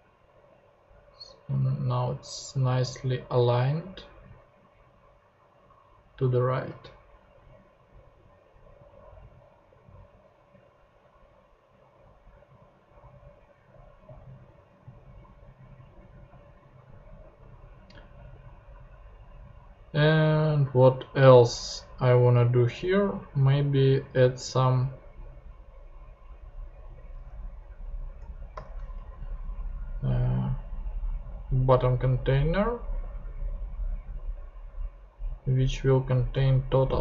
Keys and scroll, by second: 28.5 shift+super+p, 29.0 shift+super+Tab, 29.8 super+Tab.